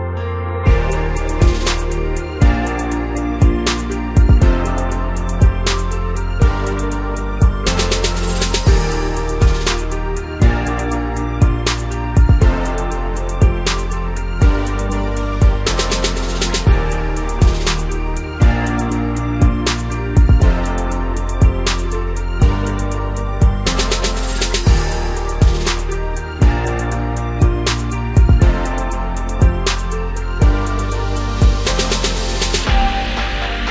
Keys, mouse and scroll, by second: 0.5 click, 1.7 Tab, 2.5 a, 4.1 click, 5.8 click, 6.2-7.9 drag, 7.9 s, 13.4 s, 16.7 Tab, 18.0 click, 18.3 scroll down 1, 18.6-21.7 middle drag, 22.3 KP_0, 23.8 scroll down 1, 24.1-27.0 middle drag, 27.0-28.0 scroll down 1, 28.0 ctrl+alt+KP_0, 29.6 click, 30.0-30.6 scroll up 2, 30.6 g, 31.9 click, 32.5-33.7 scroll up 1.